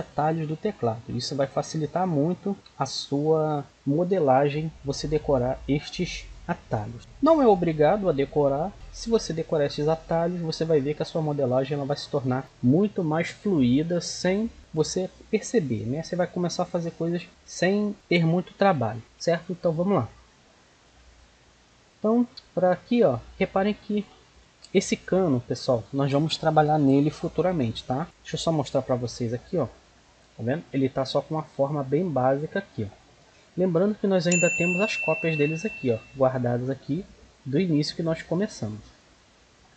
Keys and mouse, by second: 19.9-20.9 middle drag, 21.8 middle drag, 23.1-23.5 middle drag, 24.2-26.3 middle drag, 28.7 alt+h, 32.5-35.2 middle drag, 38.4-39.7 middle drag.